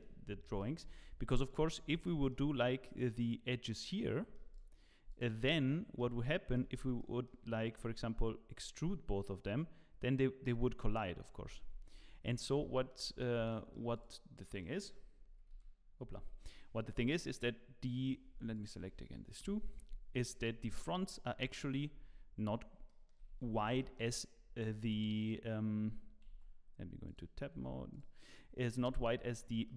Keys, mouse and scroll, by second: 0.3 scroll down 1, 1.0 scroll up 3, 1.3 shift+middle click, 1.7 scroll up 2, 2.0 shift+middle click, 2.5 middle click, 4.5 click, 5.2 shift+click, 5.5 middle click, 6.2 middle click, 6.6 Tab, 7.0 middle click, 12.6 ctrl+z, 12.6 middle click, 13.0 Tab, 13.3 scroll down 2, 13.5 middle click, 13.9 click, 14.5 click, 15.5 g, 18.5 shift+click, 19.4 KP_Divide, 20.6 KP_3, 21.4 KP_9, 22.2-22.6 scroll up 8, 22.8 shift+middle click, 23.3 Tab, 23.4-23.7 scroll up 3, 23.8 shift+middle click, 24.6 z, 26.3 Tab, 27.0 click, 27.5 Tab, 27.9 click, 28.7 2, 28.8 click, 29.3 scroll up 3, 29.6 shift+middle click.